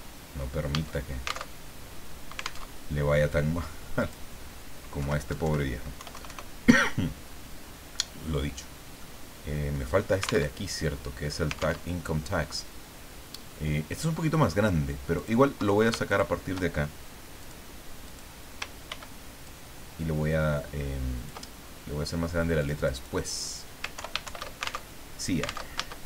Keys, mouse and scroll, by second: 0.0-0.2 typing, 1.4 alt+Tab, 2.7 alt+Tab, 4.0 click, 5.0 Left, 5.3 Delete, 5.9 KP_1, 6.1 KP_0, 9.0-10.1 drag, 10.6 alt+Tab, 11.8 alt+Tab, 15.1 click, 16.1 shift+click, 17.4 click, 18.1 click, 18.9 ctrl+d, 19.4-21.4 ctrl+drag, 22.6 click, 23.9 ctrl+Home, 24.2 ctrl+shift+End, 24.9 ctrl+alt+shift+Tab, 25.7 alt+Tab, 26.0 alt+i.